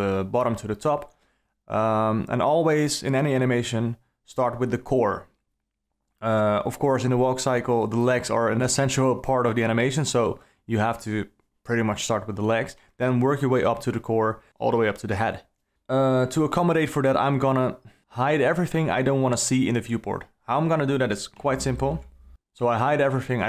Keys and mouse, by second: 1.9 click, 18.4 click, 20.5 h, 22.3 click.